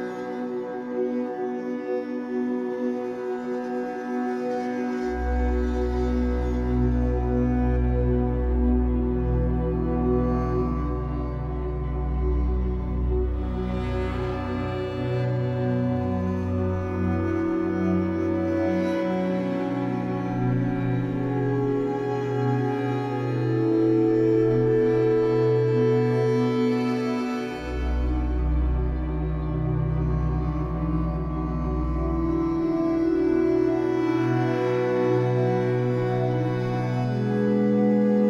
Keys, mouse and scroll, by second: 0.5 click, 1.2 1, 1.4 click, 2.3-3.0 ctrl+KP_Add, 3.5 ctrl+KP_Add, 3.7 ctrl+KP_Add, 3.9 ctrl+KP_Add, 5.0 s, 6.8 y, 7.3 g, 7.9 shift+middle click, 8.3-11.2 typing, 11.7 scroll down 2, 11.9 shift+middle click, 12.4 click, 12.6-15.5 typing, 15.9 click, 16.4 click, 16.7 alt+shift+click, 17.0 shift+middle click, 17.1-17.4 scroll up 4, 17.4 s, 18.2 z, 18.3 scroll down 6, 18.5 Tab, 18.9-20.2 middle drag, 20.2 Tab, 20.5 z, 20.7 click, 20.9 b, 21.4 z, 21.7 g, 23.6 Tab, 23.8 click, 24.0-24.6 scroll down 3, 24.1-24.4 middle drag, 24.6-25.1 shift+scroll up 1, 25.1-25.5 middle drag, 25.5 scroll up 4, 25.9-27.0 shift+middle drag, 27.0-27.3 scroll down 1, 27.3-28.8 middle drag, 29.0 alt+middle drag, 29.4-29.8 scroll up 9, 30.0-30.5 shift+middle drag, 30.5 click, 30.7 Tab, 31.2 click, 31.9-34.0 typing, 35.0 b, 35.7 click, 36.0 b, 36.4 g, 37.9-38.2 scroll down 9, 38.1 Tab.